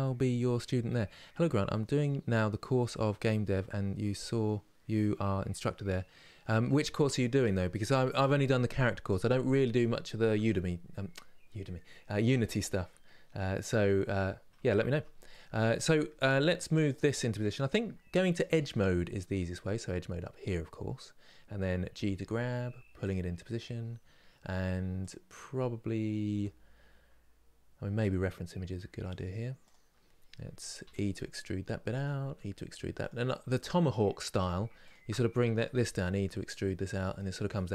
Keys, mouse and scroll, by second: 9.9 Tab, 13.3 click, 16.6 click, 21.6 g, 23.3 click, 24.8 click, 26.0 g, 29.4 click, 34.1 click, 35.4 e.